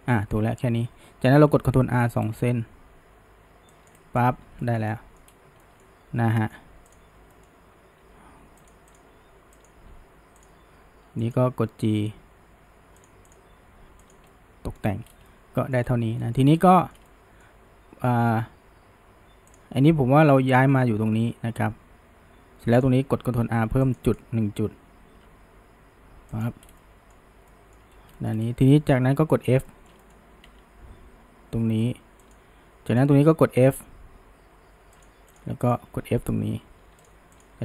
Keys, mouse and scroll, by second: 1.8 ctrl+r, 4.6-5.3 shift+middle drag, 5.3-5.6 scroll up 1, 5.6-6.9 shift+middle drag, 6.9 click, 7.3 middle click, 8.0 g, 9.0 click, 9.1 g, 9.9 g, 11.3 click, 12.0 g, 13.3 click, 13.5 g, 14.3-15.1 middle drag, 15.1 scroll, 15.3-15.9 middle drag, 15.9-16.2 scroll, 16.2-16.6 shift+middle drag, 16.6 scroll, 16.8-19.6 shift+middle drag, 19.6 click, 20.6 g, 24.1 right click, 25.3 g, 26.8-27.9 middle drag, 28.2 shift+middle drag, 29.4 click, 29.7-30.5 shift+middle drag, 30.5 f, 32.9 click, 33.7 f, 35.7 shift+click, 36.1 f, 37.1 click.